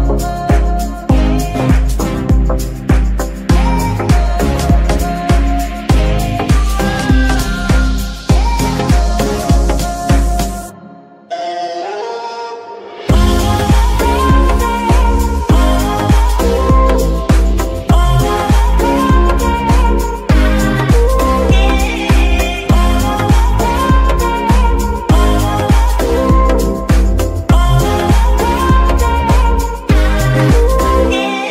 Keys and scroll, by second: 19.0 z, 25.7 KP_7, 26.6 KP_Decimal.